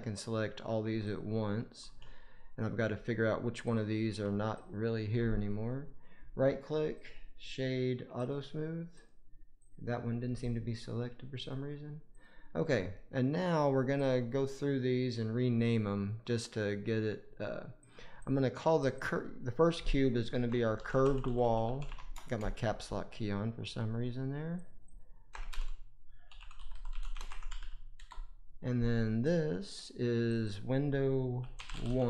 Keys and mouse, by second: 1.0 click, 3.6 click, 4.5 shift+click, 6.8-8.2 drag, 9.5 click, 10.5-11.4 drag, 12.0 click, 17.7 click, 18.1 click, 18.9-21.8 drag, 22.1 BackSpace, 24.5 click, 24.8-27.9 drag, 27.5 l, 29.1 click, 30.2 click, 30.4-32.0 drag.